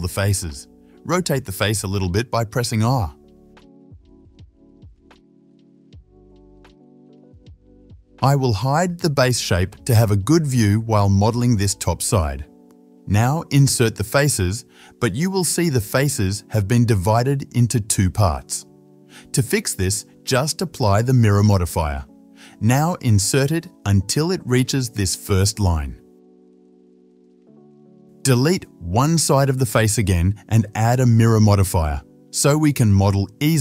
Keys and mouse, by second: 2.1 r, 5.0-7.7 shift+middle drag, 7.7 click, 7.7 KP_7, 8.6 middle click, 9.1 shift+z, 12.1 click, 15.1 i, 20.7 ctrl+z, 21.0 Tab, 22.0-27.0 drag, 23.1 Tab, 24.5 i, 27.0-30.6 shift+middle drag, 30.2 3, 30.6-33.6 drag, 32.1 x.